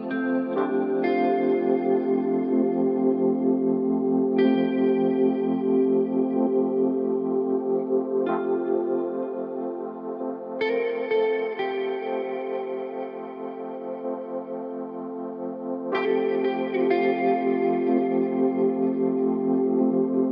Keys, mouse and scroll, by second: 2.8 scroll down 5, 4.3 click, 4.5 scroll up 2, 14.2-16.2 middle drag, 16.2 scroll down 2.